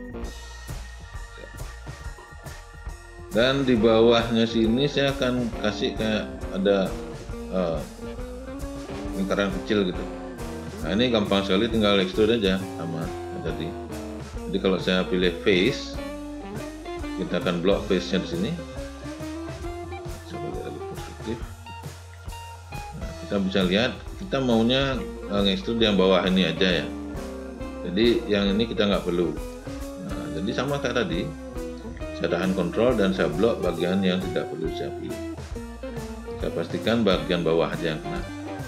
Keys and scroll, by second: 19.8 space.